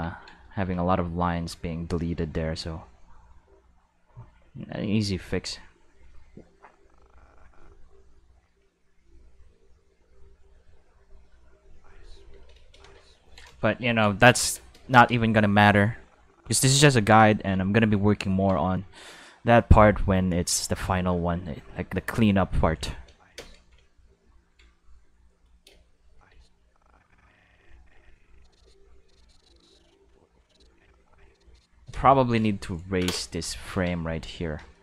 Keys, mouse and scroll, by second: 0.4 click, 1.2-4.6 drag, 5.3 click, 6.0-8.4 drag, 9.2-10.6 drag, 11.3 click, 11.5 space, 12.2 space, 12.4 click, 12.5 space, 14.9 space, 15.1 click, 15.5-16.6 drag, 20.9-21.8 drag, 21.9 drag, 22.9 space, 23.4 space, 25.5 click, 25.7 space, 26.3 space, 26.5-31.7 drag, 33.7 Tab, 34.1 a, 34.6 shift+z.